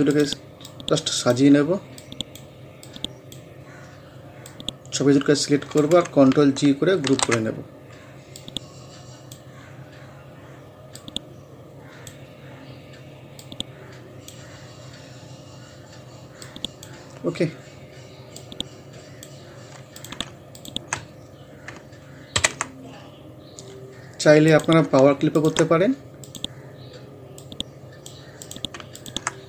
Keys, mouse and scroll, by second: 0.1-7.1 drag, 7.1 ctrl+g, 7.5 scroll down 1, 8.4-9.7 drag, 9.7 scroll up 1, 11.0-16.4 drag, 16.4-20.0 drag, 22.4 ctrl+u, 24.5-29.4 drag.